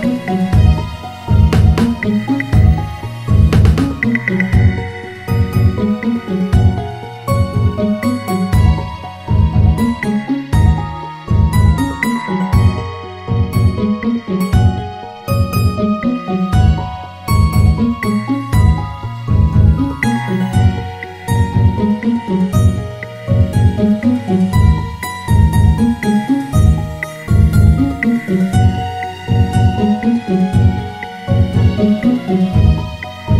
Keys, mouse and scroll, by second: 3.6 Tab, 6.3-9.4 drag, 10.1 click, 11.7 Delete, 14.1-14.7 scroll up 1, 15.0 click, 15.6 alt+shift+click, 16.5 s, 21.7 Tab, 23.4-28.5 drag, 30.1-31.1 drag, 31.1-33.3 right drag.